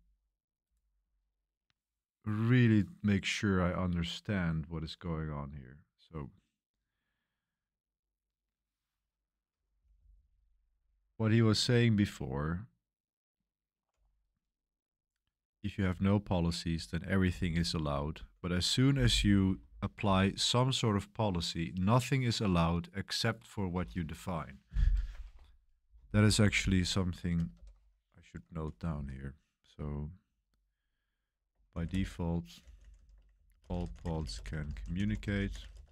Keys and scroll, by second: 9.5-12.0 typing, 15.5 typing, 18.0 typing, 27.5 super+7, 28.8 typing, 31.4-35.9 typing.